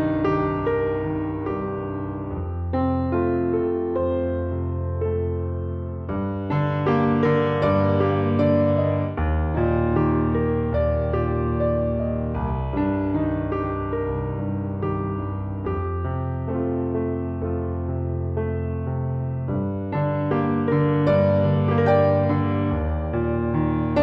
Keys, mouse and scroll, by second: 0.1-1.4 right drag, 1.4 middle click, 1.6-4.3 right drag, 4.3 middle click, 4.4-24.0 right drag, 5.9 click, 7.2-12.1 drag, 13.0-17.5 drag, 20.9 click, 21.9 click, 22.4 click, 23.1 click.